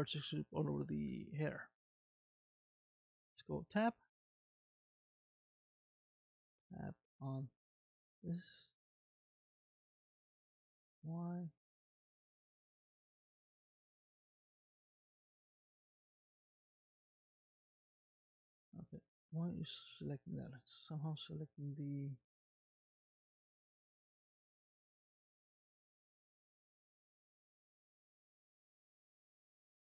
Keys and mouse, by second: 3.4 Tab, 4.8 Tab, 5.7 click, 6.4 click, 7.3 Tab, 8.1 middle click, 10.4 Tab, 11.6 click, 14.8 Tab, 16.9 click, 17.5 middle click, 18.6 Tab, 19.6 click, 20.1 click, 22.7 g, 28.3 Tab.